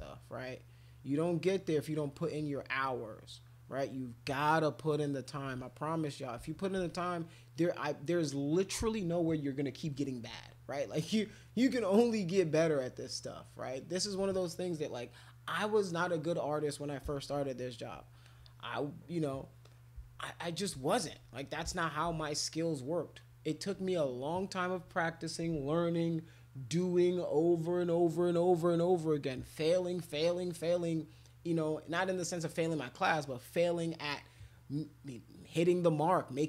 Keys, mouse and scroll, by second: 0.0-1.7 shift+drag, 1.8 shift+click, 2.1 shift+click, 2.4 shift+click, 2.5-5.2 shift+drag, 5.6 click, 6.9 click, 18.2 alt+click, 19.1 click, 19.6 click, 20.6 shift+click, 21.4 shift+click, 22.2 alt+click, 22.7 alt+click.